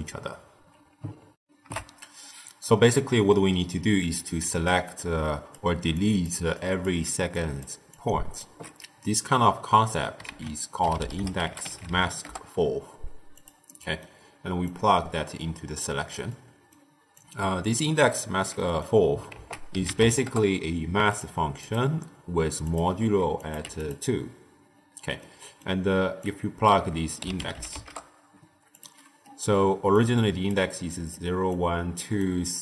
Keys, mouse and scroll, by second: 1.3 ctrl+alt+shift+w, 4.0 ctrl+alt+shift+q, 4.3-8.5 typing, 4.6 click, 5.2 click, 5.9 click, 6.5 click, 7.2 click, 7.8 click, 8.9-10.2 middle drag, 10.2 ctrl+a, 13.6-14.6 middle drag, 14.6 click, 16.2-17.1 middle drag, 17.1 click, 18.5 middle click, 19.2 ctrl+a, 21.5-23.8 drag, 24.7-25.1 scroll up 1, 25.1-26.1 middle drag, 26.1 click, 29.1 middle click, 29.5-32.6 typing, 29.9-30.4 drag, 30.8 click, 31.5 click, 32.1 click.